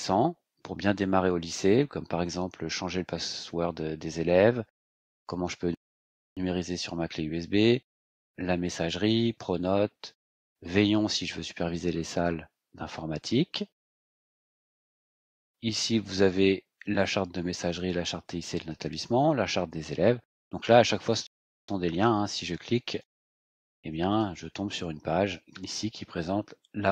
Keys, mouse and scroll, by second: 22.8 ctrl+click, 24.1 click, 24.8-26.9 scroll down 12.